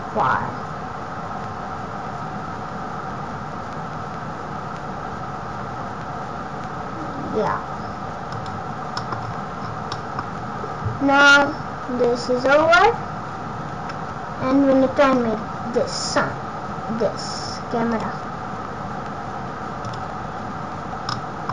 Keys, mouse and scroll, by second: 8.9 middle click, 9.1 scroll down 1, 9.8 scroll down 10, 9.9 middle click, 10.1-10.6 scroll up 7, 11.3 middle click, 12.6 scroll up 1, 12.9 scroll down 1, 13.7-14.1 scroll down 3, 14.2 scroll up 1, 14.9-15.4 scroll up 4, 15.8 scroll down 1, 17.9 click, 19.8 click, 21.0 middle click.